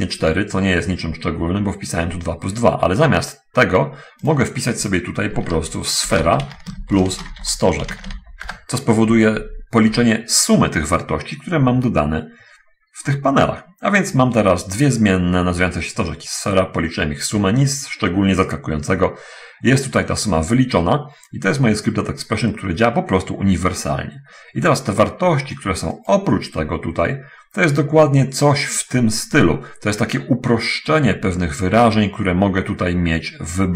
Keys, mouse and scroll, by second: 1.1 middle click, 4.7 click, 6.0-8.4 typing, 8.9 Return, 12.2-12.5 scroll down 1, 16.8 scroll up 1, 26.2 right click.